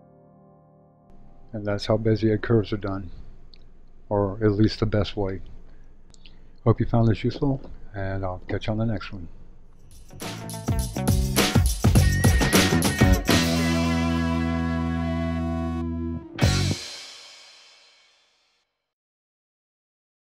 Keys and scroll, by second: 0.2 shift+super+/.